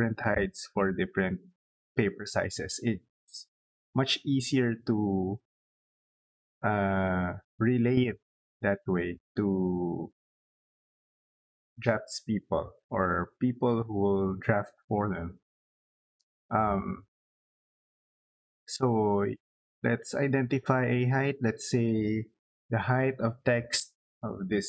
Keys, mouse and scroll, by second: 20.2 click.